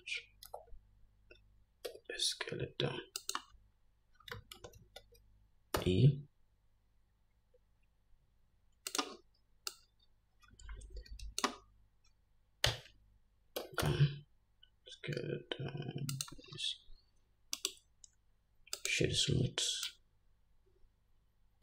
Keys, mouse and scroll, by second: 0.8 ctrl+z, 2.2 s, 4.9 ctrl+z, 5.1 ctrl+z, 6.1 e, 10.0-16.6 drag, 13.0 Tab, 13.9 s, 17.9-21.6 right drag, 20.2-21.6 drag.